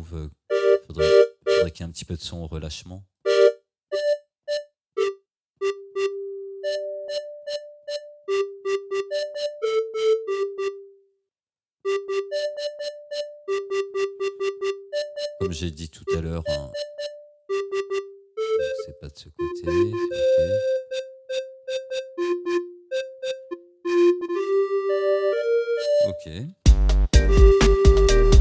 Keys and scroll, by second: 26.6 space.